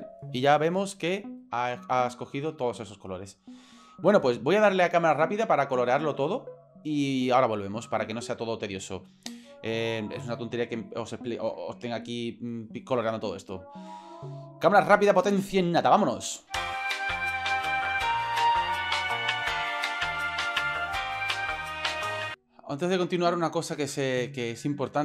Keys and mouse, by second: 11.9 ctrl+right click, 16.8 shift+middle click, 17.8 shift+right drag, 18.1 shift+right drag, 18.7 ctrl+p, 18.9 ctrl+z, 19.2 shift+middle click, 19.5 shift+middle click, 19.7 shift+right click, 19.8 ctrl+l, 20.7 shift+middle click, 21.0 shift+right click, 21.6 shift+middle click, 22.0 ctrl+p.